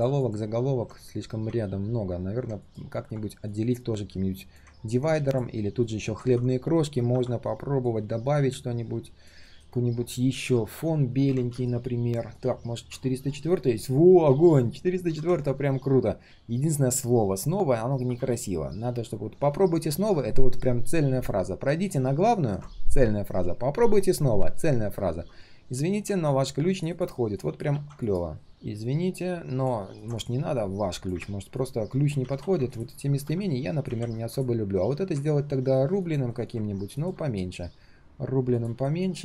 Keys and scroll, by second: 6.1 ctrl+z, 9.4 ctrl+shift+[, 10.4 ctrl+z, 11.1 ctrl+z, 27.7 ctrl+x, 32.2 ctrl+z, 32.4 ctrl+z, 33.9 ctrl+v, 36.3 ctrl+alt+c, 37.2 ctrl+alt+v.